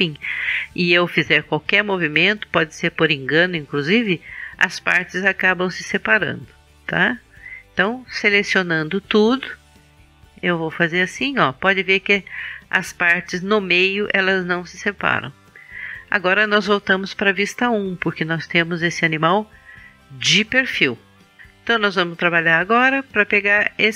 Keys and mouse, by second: 8.4 a, 9.0 a, 10.7-12.9 drag, 17.0 KP_1.